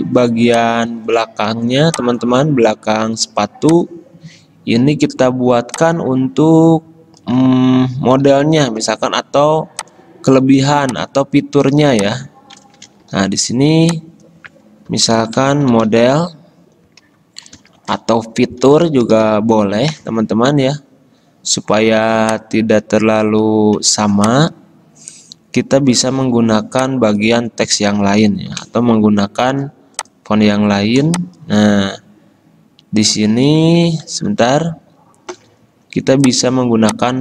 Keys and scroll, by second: 8.4 d, 13.2 typing, 15.1-16.5 typing, 17.3 ctrl+Right, 17.9 ctrl+shift+Right, 18.6-19.9 typing, 24.3 BackSpace, 31.2 ctrl+z.